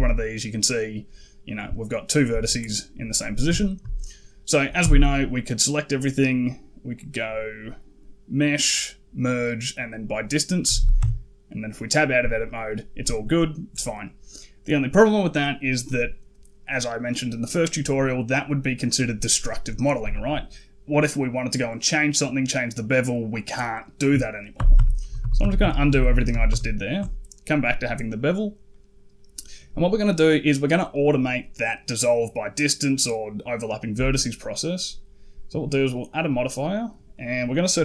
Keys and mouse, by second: 3.4 shift+middle click, 4.6 a, 6.9-9.8 drag, 10.5 a, 10.6 a, 10.8 Tab, 12.3 middle click, 24.4 ctrl+z, 24.6 ctrl+z, 24.9 ctrl+z, 25.0 ctrl+z, 25.3 ctrl+z, 28.5 middle drag, 35.7-37.8 drag.